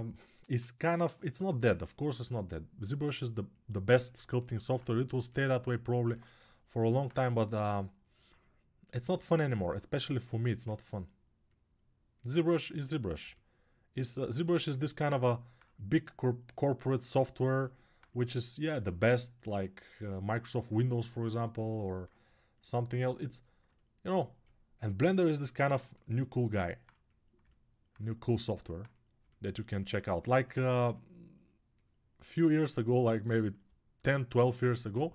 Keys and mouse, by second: 14.0-15.3 alt+right drag, 15.3-20.4 drag, 24.8-28.4 drag, 30.2-35.1 alt+right drag, 30.3 1, 35.0 [.